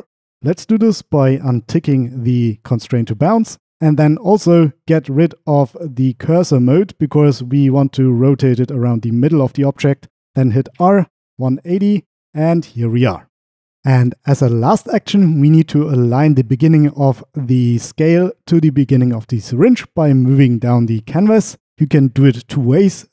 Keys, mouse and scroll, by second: 1.1-3.0 drag, 6.6-7.5 drag, 10.8 r, 11.4 KP_1, 11.7 KP_0, 12.2 Return.